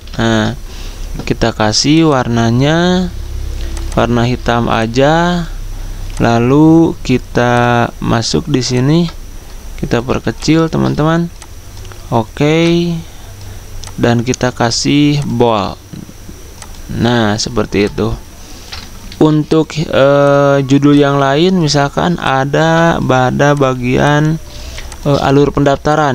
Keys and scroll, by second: 0.1 ctrl+a, 19.3 ctrl+z, 23.7 z, 25.5 typing.